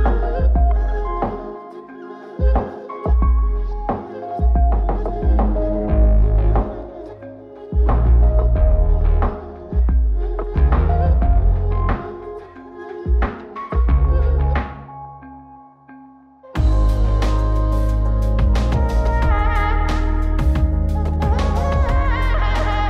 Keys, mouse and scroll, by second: 3.1 click, 3.8 click, 6.2 click, 6.9 click, 7.6 click, 8.5 middle click, 8.6 click, 9.1 middle click, 9.6-10.2 drag, 10.2 middle click, 14.6-15.1 middle drag, 16.4 click, 18.7-22.8 drag.